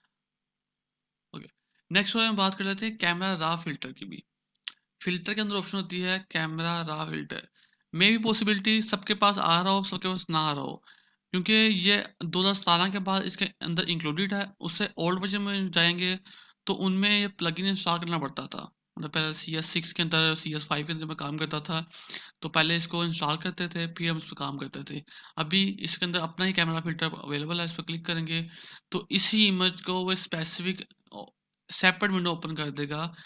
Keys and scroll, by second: 1.6 ctrl+d.